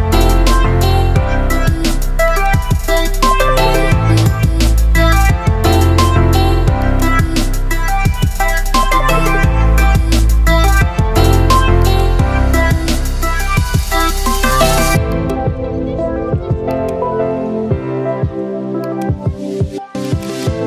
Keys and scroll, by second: 2.9 Escape, 16.5 Delete.